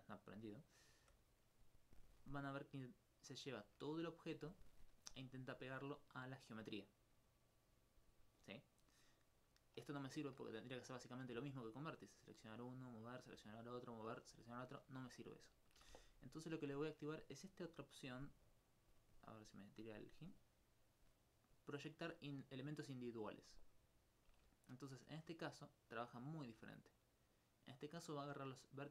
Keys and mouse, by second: 0.2 click, 8.5 right click, 13.4 right click, 14.1 right click, 15.8 a, 16.0 a, 24.0-25.0 drag, 26.5 s.